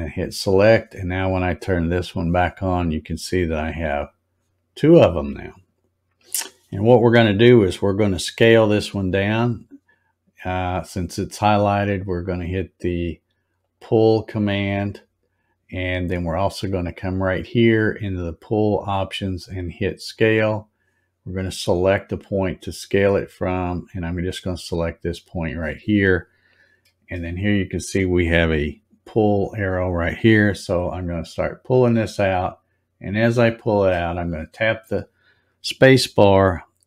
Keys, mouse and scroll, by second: 0.0 click, 1.9 click, 2.9-3.4 scroll up 2, 4.6 scroll up 2, 5.8-6.2 scroll up 1, 13.6 click, 20.3 click, 25.4 click, 32.0-33.8 drag, 33.6 space.